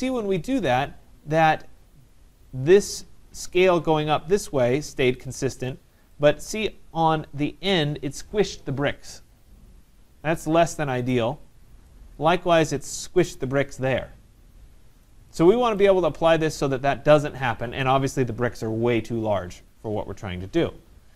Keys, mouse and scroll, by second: 0.8 right click, 1.9 middle click, 6.1 right click, 6.5 middle click, 6.6 middle click, 6.6 middle click, 6.7 middle click, 7.8 right click, 11.1 right click, 11.4 scroll, 12.6 right click, 13.0-13.4 scroll, 14.7 middle click, 15.5 middle click, 15.8 right click, 19.6 middle click, 19.8 middle click, 19.9-20.4 scroll.